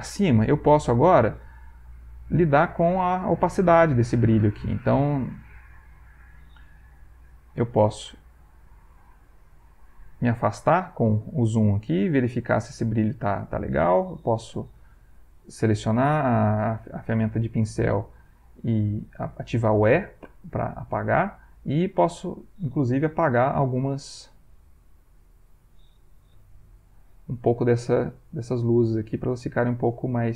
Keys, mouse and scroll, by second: 1.6 click, 2.1 click, 2.9 click, 3.7 click, 4.4 click, 5.0 click, 5.8 click, 6.9 ctrl+middle click, 8.4 click, 9.2 click, 10.8 click, 12.0-13.2 ctrl+middle drag, 13.3 ctrl+middle click, 14.5 e, 15.0 right click, 17.6 click, 19.8 e, 21.0 shift+click, 21.9 click, 23.2 ctrl+z, 25.0 shift+click, 26.3 e, 26.8 click, 27.4 shift+click, 28.1 shift+click, 29.5 shift+click, 30.0 shift+click.